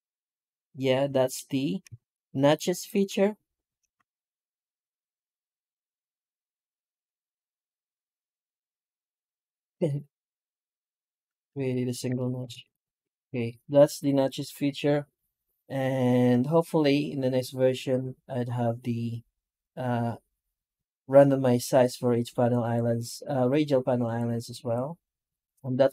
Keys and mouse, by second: 1.8 shift+q, 2.5 right click, 2.8 Tab, 3.4 right click, 3.8 shift+q, 11.4 ctrl+z, 11.9 Tab, 12.3 shift+q.